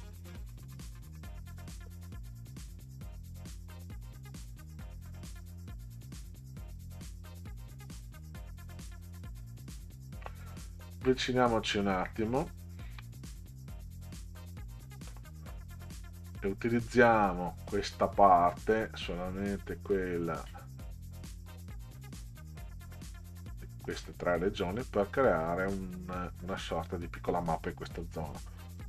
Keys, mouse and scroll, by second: 2.0 Delete, 7.0-8.2 drag, 9.2 Delete, 12.6 ctrl+scroll up 2, 15.1-15.5 middle drag, 20.2 click, 22.2 shift+click, 23.0 shift+click, 25.8-26.2 middle drag, 28.8 ctrl+c.